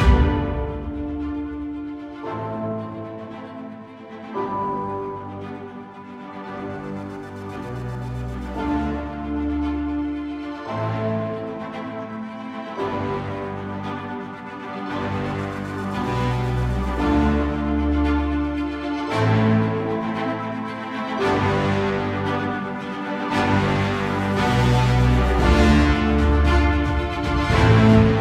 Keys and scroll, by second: 9.7 ctrl+0, 10.2 ctrl+=, 11.0 ctrl+space, 26.5 ctrl+space, 26.6 ctrl+z.